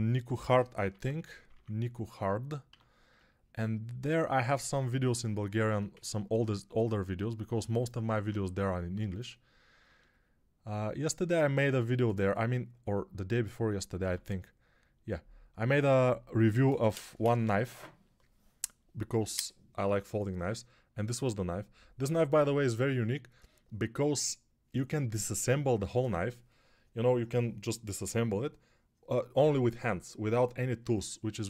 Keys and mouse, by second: 0.1-1.4 typing, 2.5 1, 8.0 ctrl+alt+3, 13.9 x.